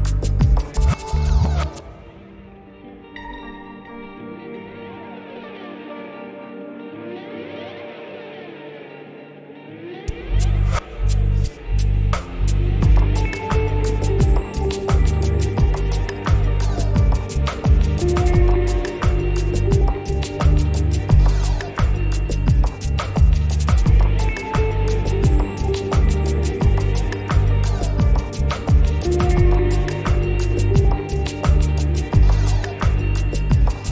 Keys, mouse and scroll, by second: 7.2 right click, 8.4 click, 8.4 click, 11.2 click, 13.6 click, 15.2 click, 20.2 scroll down 1, 20.5 scroll, 20.5 scroll up 1, 23.9 click, 27.2 click, 32.8 click.